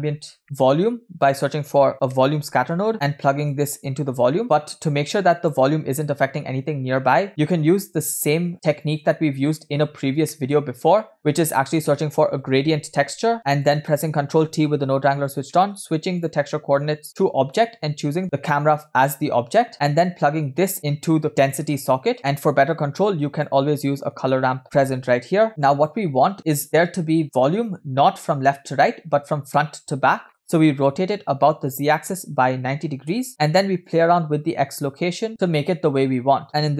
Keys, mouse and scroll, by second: 0.4 scroll up 2, 0.4 shift+a, 3.5-6.5 drag, 8.5 scroll down 3, 9.2 middle click, 9.7-10.0 scroll up 4, 10.3 middle click, 11.0 middle click, 11.2 shift+a, 13.4 middle click, 13.6 click, 14.6 ctrl+t, 15.5 middle click, 16.2-16.8 drag, 17.1 click, 18.2-19.2 drag, 19.7-20.7 middle drag, 19.7 scroll down 1, 20.8 click, 22.2 scroll down 1, 22.6 click, 24.3 shift+a, 25.5 click, 26.2 click, 30.3 middle click, 31.7-33.2 drag, 33.8-36.5 drag, 36.5 middle click.